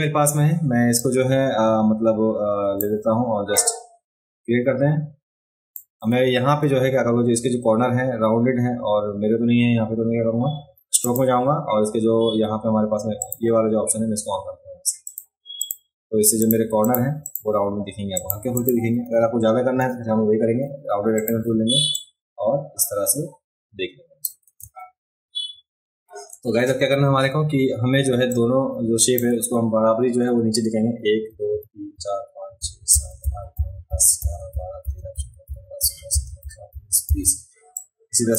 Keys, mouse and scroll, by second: 1.0-2.8 drag, 3.5-5.7 drag, 6.6 a, 11.0 click, 13.2 click, 15.0 click, 15.6 click, 16.4 click, 16.8 click, 17.2 click, 18.1 click, 18.6 click, 21.1 click, 21.9-24.2 drag, 28.3-29.1 drag, 37.7 click.